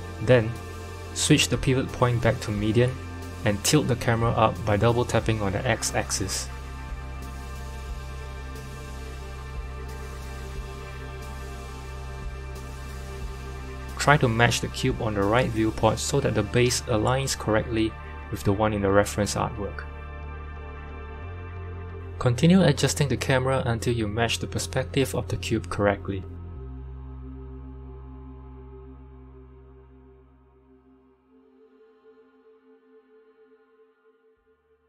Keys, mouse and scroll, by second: 2.2 KP_1, 3.9 r, 5.8-7.7 drag, 7.7 r, 9.8-14.2 drag, 11.2 r, 19.2 KP_7, 20.2-20.6 scroll down 1, 20.6 shift+middle click, 21.2-22.1 scroll up 1, 22.1 g, 28.0-32.2 drag, 29.2 r.